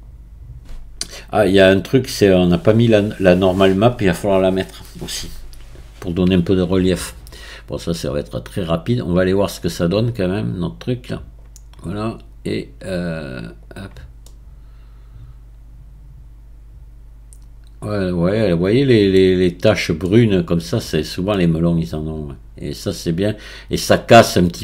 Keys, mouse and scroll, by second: 9.1 click, 11.0-13.7 drag, 14.2-17.2 middle drag, 18.9-20.9 middle drag, 20.9-21.4 scroll down 2, 21.4-24.4 middle drag.